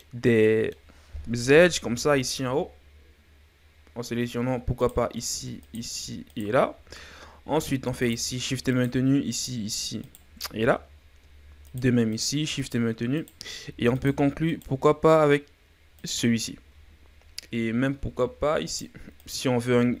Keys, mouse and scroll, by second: 1.3 KP_7, 2.3 scroll up 1, 4.8 right click, 5.6 shift+right click, 6.3 shift+right click, 6.7-8.0 ctrl+scroll up 4, 8.0 shift+right click, 8.7 shift+right click, 9.3 shift+right click, 10.0 shift+right click, 10.5-11.6 ctrl+scroll up 5, 11.6 shift+right click, 12.1 shift+right click, 12.6 shift+right click, 13.2 shift+right click, 13.9 shift+right click, 14.5 shift+right click, 16.0 shift+right click, 16.4-17.3 scroll down 4, 17.3-18.7 scroll up 2, 18.7 shift+right click, 19.1 shift+right click.